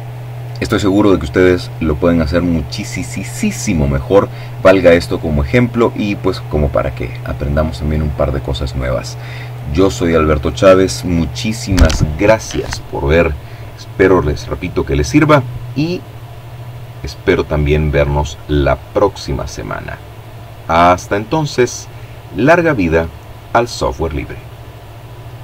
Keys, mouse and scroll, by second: 22.2 click, 22.9-25.4 drag.